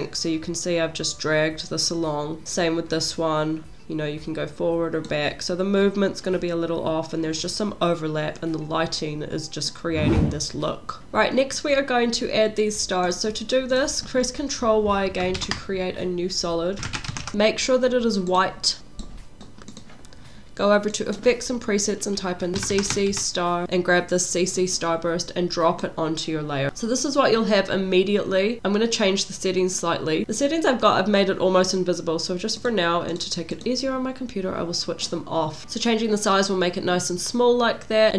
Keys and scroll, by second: 15.4 ctrl+y, 16.7-17.8 typing, 22.5-23.6 typing.